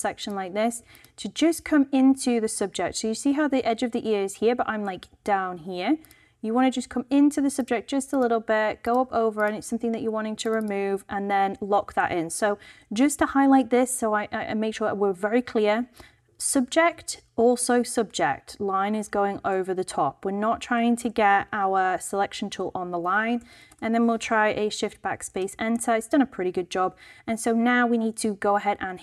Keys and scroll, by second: 23.4 alt+shift+BackSpace, 23.6 shift+Return, 24.6 Return, 25.5 super+d.